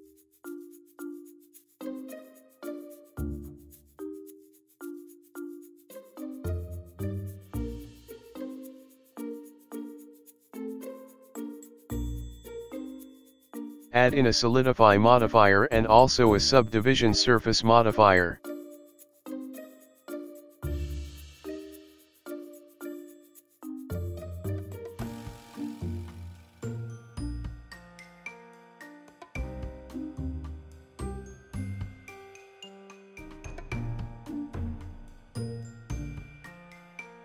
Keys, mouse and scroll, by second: 1.1 shift+middle click, 1.9-2.9 scroll up 4, 2.9-3.8 scroll up 2, 4.1 middle click, 5.8-7.1 scroll down 6, 7.1 middle click, 12.9 click, 13.3 e, 13.7 click, 18.8 click, 19.2 click, 19.6 click, 20.1 click, 22.5 click, 24.3 KP_1, 25.1-26.0 scroll up 5, 26.0-26.8 scroll up 2, 28.8 shift+middle click, 32.8 click, 34.2 click, 34.9 click, 36.9 click.